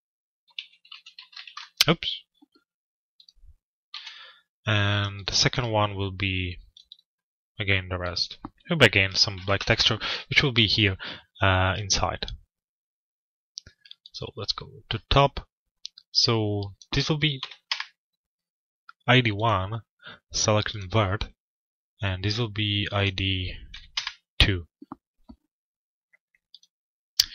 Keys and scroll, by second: 1.1 Return, 9.2 Return, 17.3 Return, 23.5 Return.